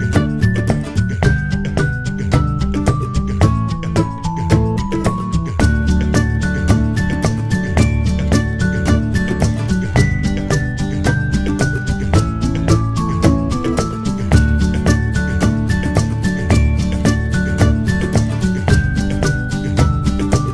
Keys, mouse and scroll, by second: 0.1-2.3 alt+drag.